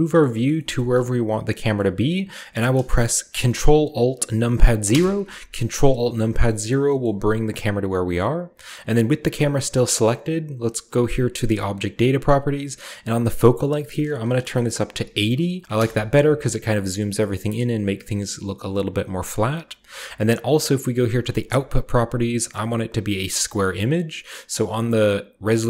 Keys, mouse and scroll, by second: 4.9 alt+KP_0, 6.3 shift+middle click, 6.5-7.7 shift+scroll up 1, 7.1-8.7 shift+middle drag, 7.7-8.7 scroll up 1, 8.7 click, 9.7 click, 11.6 click, 13.7-14.9 drag, 14.9 typing, 15.7 Return, 17.0-17.4 scroll down 1, 17.4-18.7 scroll up 1, 21.4 click, 24.5 click.